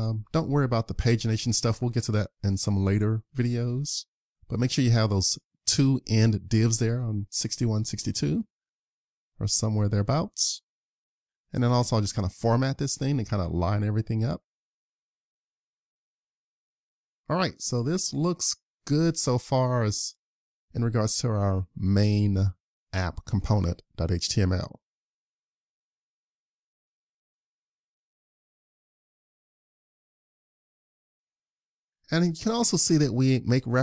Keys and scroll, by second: 2.0 super+Tab, 8.1 super+s, 18.7 super+s, 28.3 super+s.